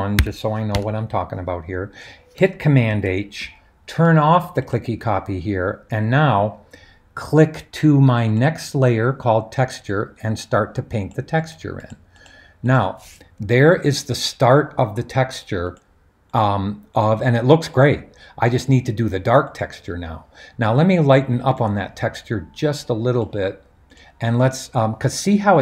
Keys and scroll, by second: 0.1-0.7 typing, 2.9 super+h.